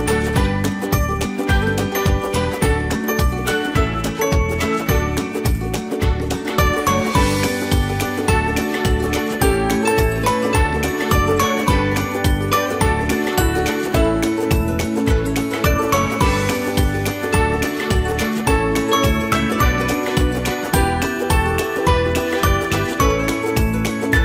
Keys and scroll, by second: 5.4 ctrl+c, 5.8 ctrl+shift+v, 13.7 alt+Tab.